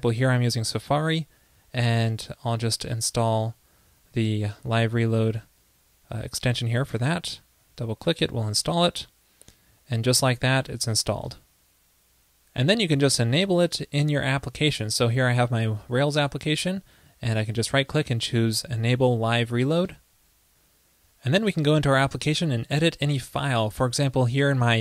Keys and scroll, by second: 4.9 super+`.